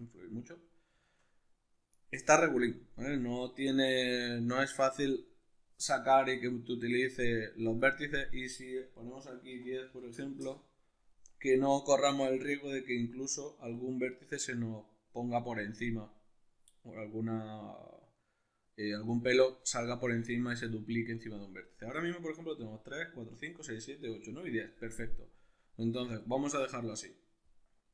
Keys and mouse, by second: 0.5-3.0 middle drag, 3.0 click, 3.9 click, 6.4-8.2 middle drag, 8.2-18.6 drag, 10.5 Return, 18.6-27.9 middle drag.